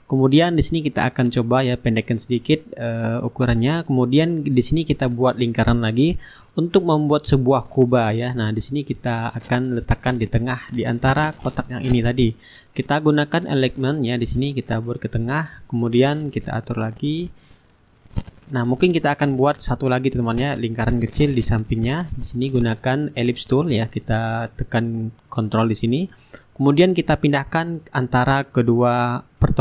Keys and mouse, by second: 2.3-4.4 drag, 4.8-7.6 ctrl+drag, 7.8 click, 9.2 click, 10.3 shift+click, 12.4 click, 13.9-16.4 drag, 17.7 shift+click, 19.1 click, 22.3-25.2 drag, 25.3 click, 26.5-29.4 drag, 29.4 right click, 29.4 middle click.